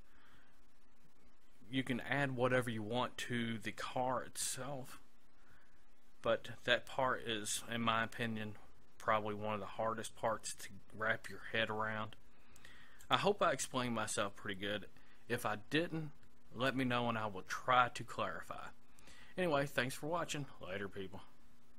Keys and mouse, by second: 13.0-14.9 drag.